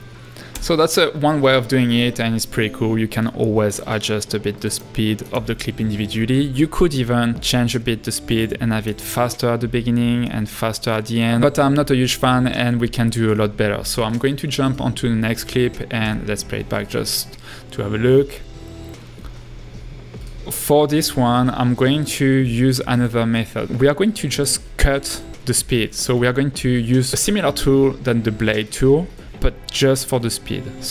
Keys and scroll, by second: 0.7 space, 3.2 l, 5.8 super+r, 16.1 space, 27.9 b, 30.1 a.